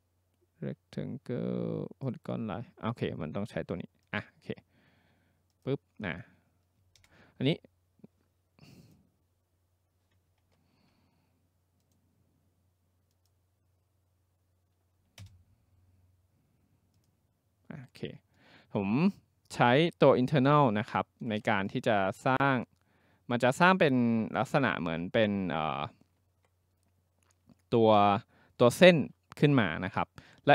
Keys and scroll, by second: 7.0 Return, 10.5 ctrl+z, 15.2 Return.